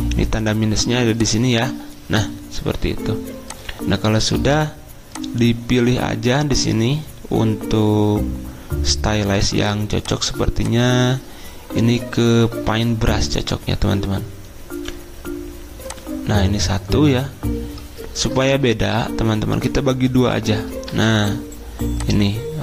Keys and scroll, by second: 1.2 -, 20.9 =.